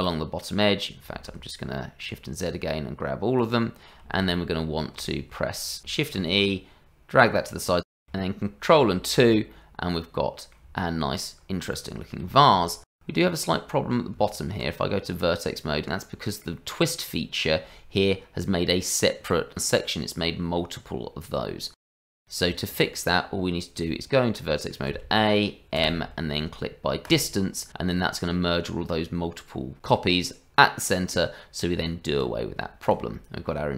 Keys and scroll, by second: 1.2 shift+z, 4.1 shift+z, 6.2 shift+e, 7.9 Tab, 9.5 ctrl+2, 14.0 Tab, 22.5 Tab, 23.9 Tab, 24.9 a, 25.7 m, 31.7 Tab.